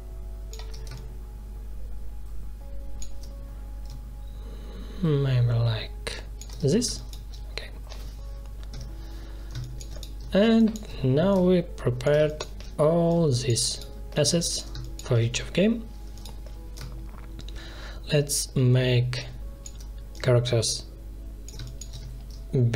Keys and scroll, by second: 6.8 space, 8.6 0, 9.4 space, 12.1 space, 14.6 space, 21.5 space.